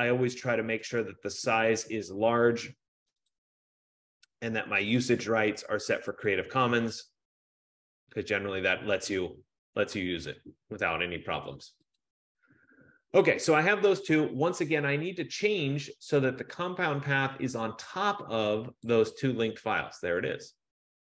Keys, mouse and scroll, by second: 3.7 click, 6.4 click, 12.2 click, 18.9 click.